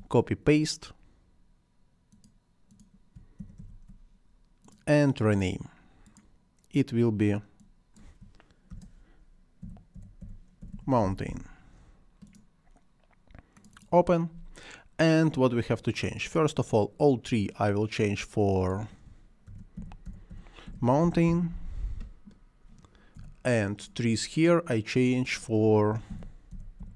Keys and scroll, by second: 3.4 ctrl+c, 3.6 ctrl+v, 8.7-11.8 typing, 19.3-21.8 typing, 23.2 Return, 25.7-26.9 typing.